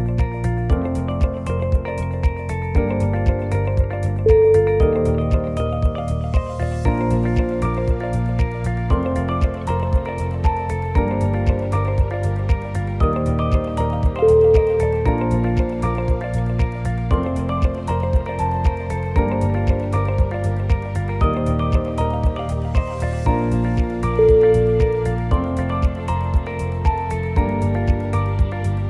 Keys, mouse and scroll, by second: 0.0 click, 0.4 2, 0.7 click, 0.9 shift+click, 1.6 f, 1.9 click, 2.8 f, 3.1 scroll down 3, 3.8 1, 4.0-4.7 scroll up 2, 4.7 click, 5.2 shift+click, 5.9 f, 6.5 click, 6.8 shift+click, 7.4 f, 7.8 click, 8.4 shift+click, 9.0 scroll up 1, 9.0 shift+z, 10.9 click, 11.5 shift+click, 12.5 shift+click, 12.6 scroll down 5, 12.6 e, 14.6 click, 15.1 g, 16.1 click, 16.4 g, 17.6 click, 18.0 g, 19.6 g, 20.9 g, 22.2 click, 22.6 g, 23.6 g, 25.5 click, 25.8 g, 27.7 click, 28.1 g.